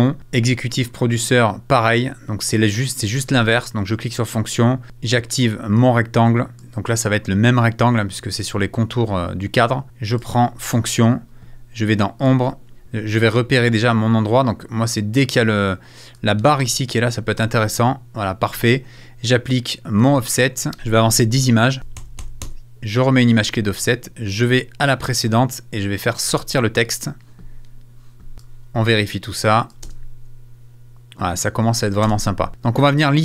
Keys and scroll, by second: 21.8 Right, 29.8 space, 31.5 space.